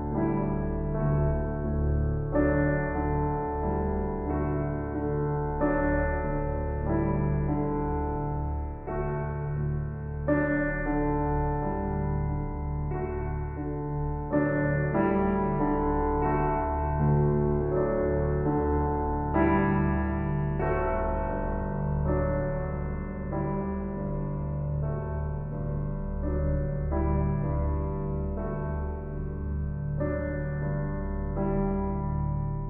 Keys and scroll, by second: 2.3 ], 10.6 ], 25.7 [.